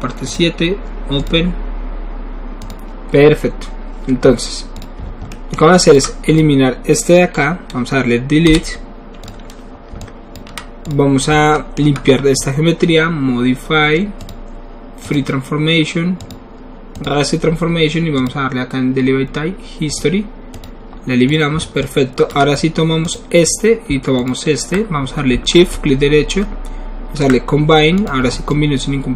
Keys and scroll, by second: 8.5 Delete.